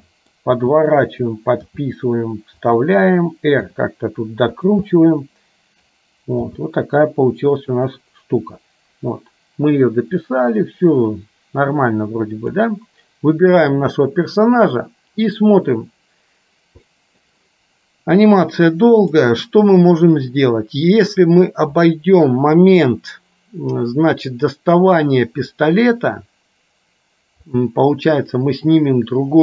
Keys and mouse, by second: 0.1 middle click, 0.6 r, 1.9 g, 3.7 r, 5.0-6.0 middle drag, 6.5 g, 8.6-12.7 drag, 17.0 middle click, 27.6 click.